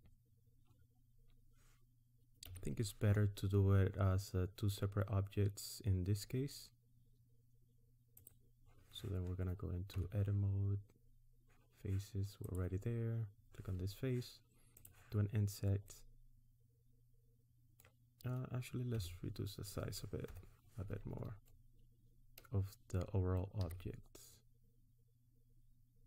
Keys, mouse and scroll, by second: 0.0-0.5 scroll down 1, 2.4 g, 9.9 Tab, 12.4 click, 14.7 click, 15.9 middle click, 19.0 Tab, 20.3 KP_1, 23.6 s.